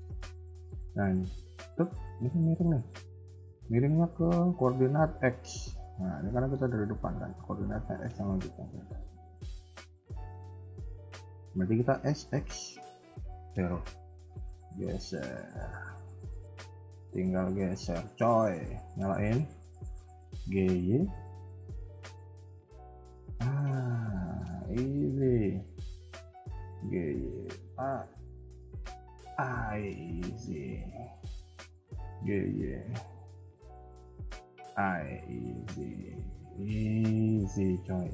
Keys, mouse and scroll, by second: 1.4 click, 2.5 ctrl+click, 5.3-6.1 scroll down 11, 6.2 shift+middle click, 6.6 scroll up 2, 8.2-9.0 scroll up 6, 8.3 shift+middle click, 9.2 shift+middle click, 9.5-10.0 scroll up 3, 10.1 shift+middle click, 11.8 s, 14.4 g, 15.5 KP_3, 15.8 scroll down 2, 16.4 middle click, 17.2 KP_3, 18.9 click, 19.2-20.0 scroll up 2, 20.0 g, 23.8 click, 24.2 shift+middle click, 25.6 shift+click, 26.8 g, 30.2 click, 31.0 b, 31.9 g, 34.8 KP_1, 35.1 scroll down 2, 35.3 Tab, 35.5 middle click, 36.2 scroll down 2, 36.4 middle click.